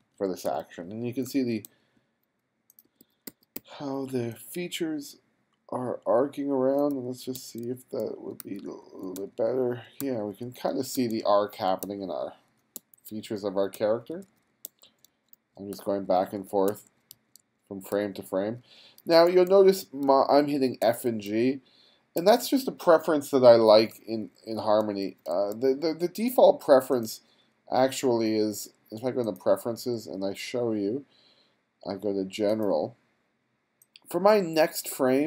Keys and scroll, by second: 0.5 f, 1.7 g, 2.9 b, 6.9 f, 7.4 g, 8.5-12.8 typing, 13.8 f, 14.7 g, 15.8 f, 16.7 g, 18.0 f, 19.1 g, 20.1 f, 20.9 g, 24.0 f, 25.1 g.